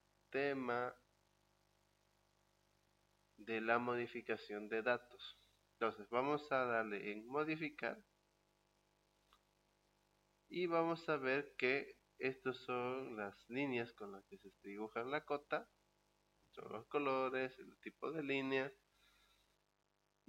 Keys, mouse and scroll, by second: 8.0 click.